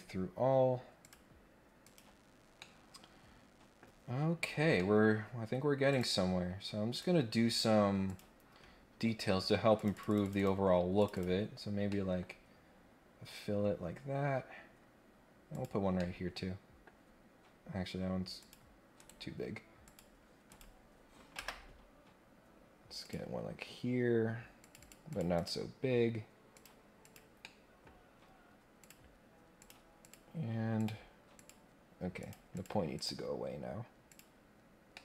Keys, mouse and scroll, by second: 1.0 click, 1.8 click, 2.3 scroll down 1, 2.5-3.8 middle drag, 3.8-4.1 scroll up 2, 4.1-4.6 scroll down 2, 4.7 middle click, 5.9 click, 6.9 click, 8.0 click, 9.7 click, 10.2 click, 10.9 click, 11.1 click, 11.9 middle click, 15.5 click, 16.0 middle click, 18.3 click, 19.0 right click, 19.8 click, 20.4 click, 23.0 click, 24.6 click, 24.8 click, 25.0 click, 25.3 click, 26.5 click, 27.0 click, 27.4 middle click, 27.9 scroll up 1, 28.0 scroll down 1, 28.8 click, 29.5 click, 30.0 click, 30.8 click, 31.3 click, 32.2 click, 32.5 click, 32.9 click, 34.0 click, 34.9 middle click.